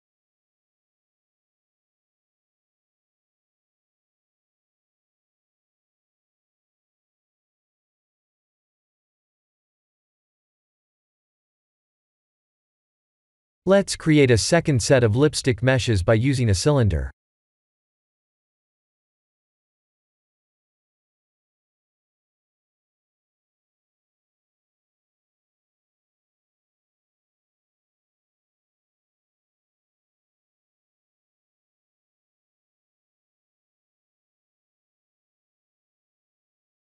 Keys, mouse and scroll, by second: 0.4 shift+middle click, 1.0 scroll up 2, 1.3 shift+middle click, 2.3 g, 4.5 Tab, 4.8-5.4 scroll down 7, 5.4 Tab, 5.7 click, 6.1 scroll down 2, 6.5 middle click, 7.8 middle click, 9.3-10.8 scroll down 2, 11.0 middle click, 13.5 middle click, 13.7 click, 15.5 shift+a, 20.1 s, 25.4 ctrl+z, 25.8 g, 28.3 click, 30.7 s, 34.5-34.9 scroll up 1, 34.9 Tab, 35.3 3, 35.7 click, 36.3 g.